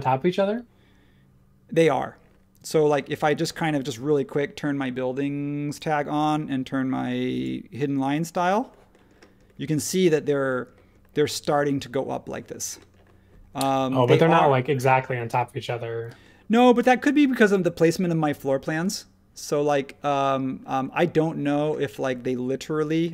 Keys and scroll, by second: 2.6 space.